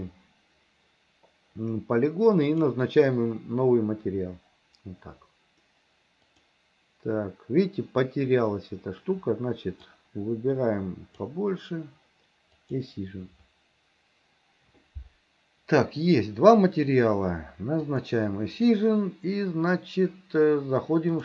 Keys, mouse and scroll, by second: 2.5 click, 6.5 click, 10.0-11.3 drag, 12.6 click, 17.9 click.